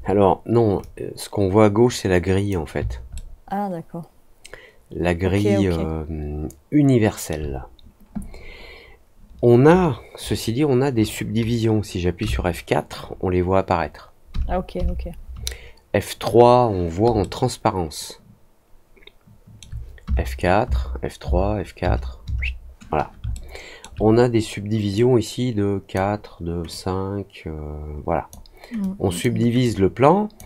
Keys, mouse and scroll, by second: 0.7-2.4 drag, 3.1-7.2 alt+middle drag, 17.1-19.5 alt+middle drag, 23.3 alt+middle click, 24.9-25.9 drag, 26.6-28.2 drag, 28.7 click, 29.6 click.